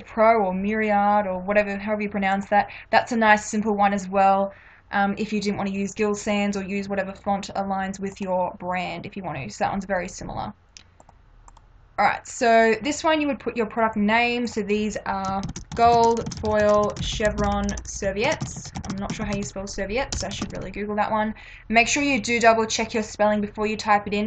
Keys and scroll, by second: 15.5-20.6 typing.